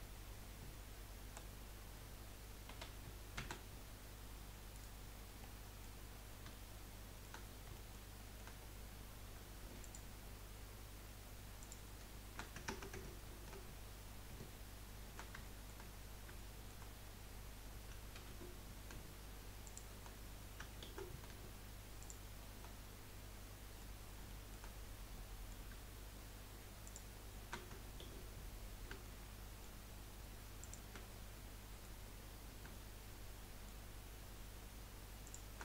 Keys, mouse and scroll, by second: 1.3 KP_1, 3.4 s, 5.1 scroll up 2, 5.5 middle click, 6.1-6.5 scroll down 2, 6.5-8.5 shift+middle drag, 8.5-9.7 scroll up 1, 9.7 scroll up 1, 9.8 alt+shift+click, 11.6 alt+shift+click, 13.2 ctrl+z, 15.4 shift+middle click, 15.9 scroll up 2, 16.3 shift+middle click, 16.9-17.7 scroll down 1, 18.1 ctrl+z, 19.6 shift+click, 20.8 ctrl+z, 22.0 shift+click, 23.1 scroll down 4, 23.4 middle click, 23.9-24.3 scroll up 1, 24.3 shift+middle click, 24.7-25.1 scroll up 1, 25.1-26.8 middle drag, 26.8 shift+click, 28.0 ctrl+z, 28.4 scroll up 1, 29.0-30.6 shift+middle drag, 30.6 shift+click, 31.0 scroll down 4, 31.3 middle click, 32.0-32.6 scroll up 5, 32.8-35.2 shift+middle drag, 35.2 shift+click.